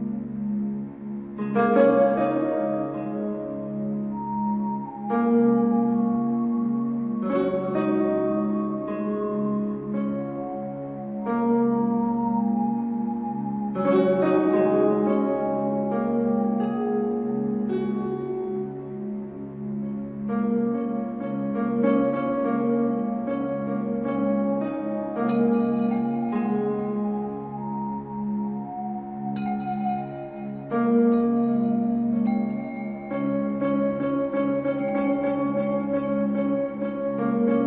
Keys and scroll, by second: 13.7 ctrl+a.